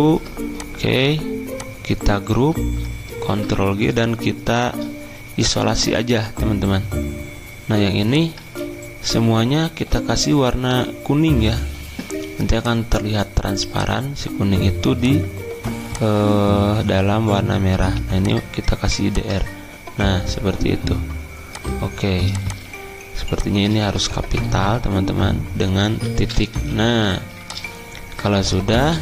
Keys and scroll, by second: 3.3 ctrl+g, 8.4 ctrl+a, 24.6 p, 25.9 ., 26.5 Escape.